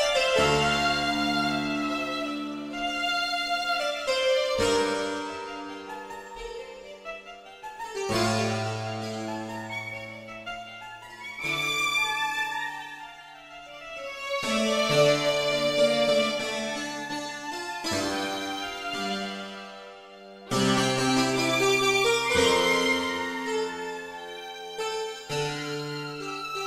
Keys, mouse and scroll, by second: 0.4-1.0 scroll up 4, 2.4 click, 2.7-4.5 scroll up 1, 7.8 click, 8.2-9.1 scroll up 1, 11.2-12.1 scroll up 3, 13.3 scroll up 1, 15.1 click, 16.0-16.3 scroll up 1, 17.5 scroll up 1, 18.6 click, 18.9 scroll up 1, 23.1-24.3 scroll up 4, 26.0-26.6 scroll up 2.